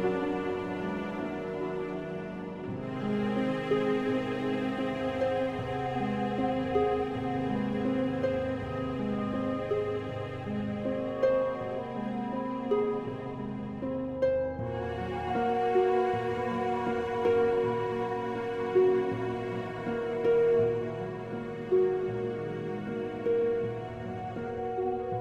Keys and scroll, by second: 2.7 super+z, 9.2 Escape, 16.3 super+t.